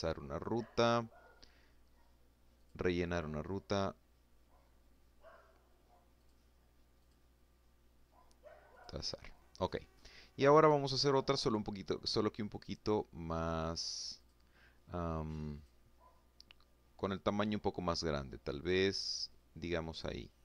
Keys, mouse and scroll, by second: 1.2 click, 4.9 click, 5.7 click, 7.4 click, 11.3 click, 12.8 click, 14.2 click, 15.8-16.2 scroll up 1, 17.3 click, 18.0 click.